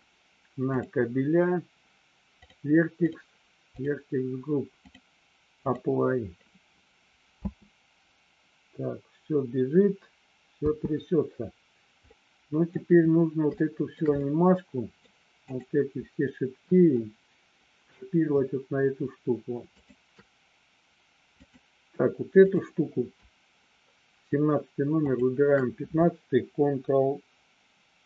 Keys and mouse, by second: 3.0 click, 5.0 click, 7.5 space, 10.9 space, 12.1 middle click, 13.7 shift+middle click, 14.3 middle click, 15.5 click, 19.8 shift+click, 21.5 click, 22.5 click.